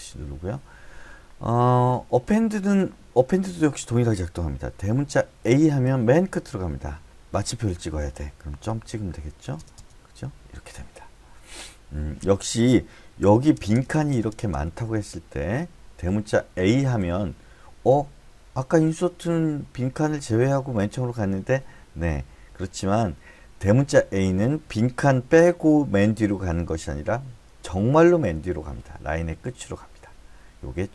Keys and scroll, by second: 5.4 a, 8.7-9.6 typing, 10.3 Escape, 13.2-14.4 typing, 14.6 Escape.